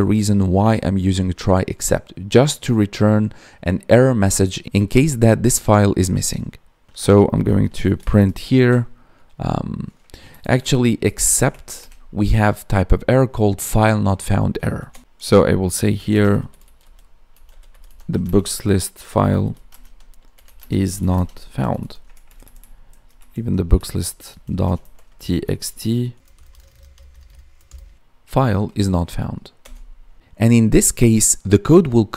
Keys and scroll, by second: 10.2 Escape, 10.5 Up, 10.9 Left, 11.1 space, 11.3 Left, 11.7 space, 16.0 space, 18.2 space, 19.6 space, 20.5 space, 21.0 space, 22.2 ctrl+Left, 23.1 Left, 26.5 ctrl+Left, 27.2 Right, 28.5 Down.